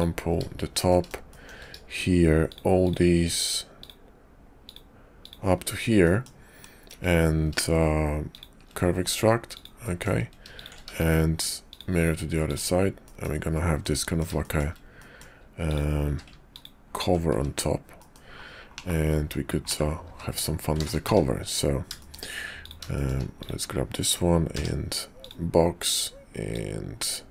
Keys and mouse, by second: 0.9 click, 1.3 shift+click, 2.4 shift+click, 2.8 shift+click, 4.5 ctrl+click, 5.1 ctrl+click, 6.0 middle click, 6.8 q, 9.8 middle click, 10.5 shift+click, 10.9 alt+x, 11.7 click, 12.5 click, 13.0 middle click, 13.8 middle click, 14.4 shift+click, 15.0 click, 15.7 click, 16.0 q, 18.0 click, 18.7 /, 19.7 /, 21.0 `, 22.0 shift+click, 22.6 click, 22.9 shift+click, 23.4 click, 24.5 d, 26.5-27.3 drag.